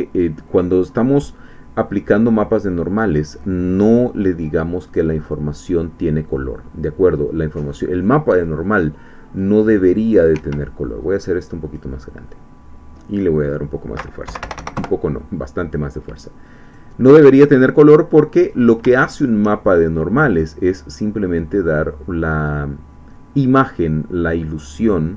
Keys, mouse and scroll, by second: 1.9-2.4 scroll up 1, 3.6-4.0 scroll down 1, 4.9 click, 7.7 click, 9.0 click, 10.3 Escape, 10.7-12.2 drag, 12.2-12.6 scroll down 1, 13.4 click, 14.2 1, 14.4 0, 14.8 Return, 16.8 click, 17.2-18.4 middle drag, 18.4-18.9 scroll up 1, 19.0 shift+middle click, 23.2-25.1 drag.